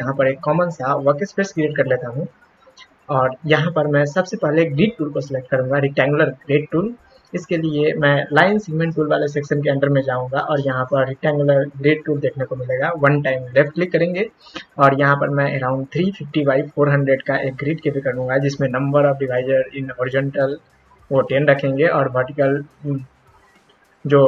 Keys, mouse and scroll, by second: 1.3 click, 9.0-11.1 right drag, 11.1 click, 13.5 click.